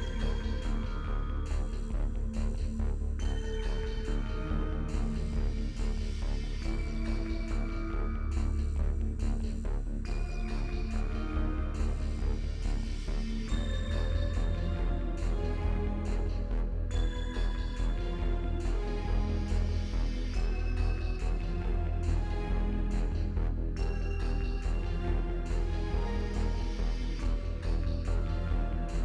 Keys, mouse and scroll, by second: 0.2 middle click, 0.4 shift+click, 1.6-2.9 shift+drag, 2.9 shift+middle click, 3.5 shift+click, 4.2 middle click, 4.8 shift+click, 5.3 shift+middle click, 5.6 shift+click, 6.1 middle click, 6.6 scroll down 3, 6.8 shift+middle click, 8.0 click, 8.4 middle click, 23.0 click, 23.4 click, 23.7 middle click, 24.4 click, 25.2 middle click, 25.5-29.0 middle drag.